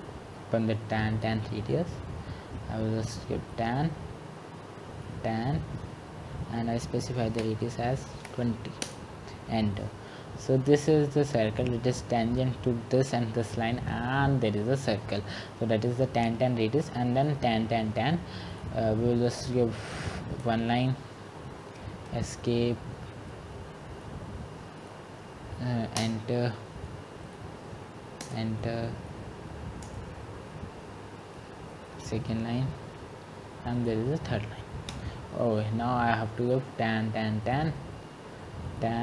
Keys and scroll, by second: 7.6 typing, 7.8 Escape, 9.0-10.8 typing, 20.3-21.0 typing, 26.2 Escape, 26.2 typing, 34.2-35.7 typing.